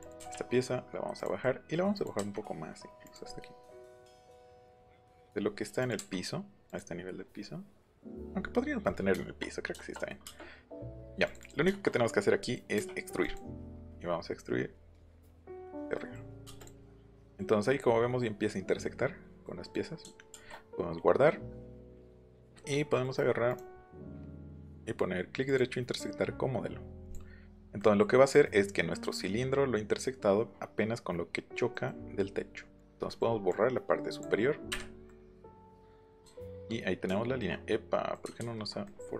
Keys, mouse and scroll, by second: 0.0 click, 0.2 Up, 1.2 click, 2.0 click, 2.2 Up, 3.0 click, 4.9 ctrl+z, 5.8 click, 6.0 Up, 6.7 click, 8.9 middle click, 11.2 click, 11.4 click, 13.2 click, 15.5 click, 16.6 click, 20.3 ctrl+s, 21.9 click, 23.5 right click, 25.5 right click, 27.0 click, 31.7 middle click, 32.8 click, 33.1 middle click, 33.5 click, 34.7 Delete, 35.1 middle click, 35.7 middle click, 38.4 ctrl+z.